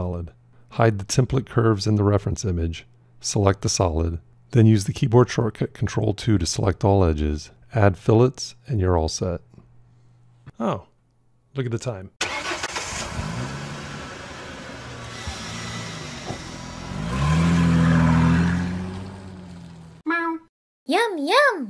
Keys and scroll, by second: 4.9 ctrl+2.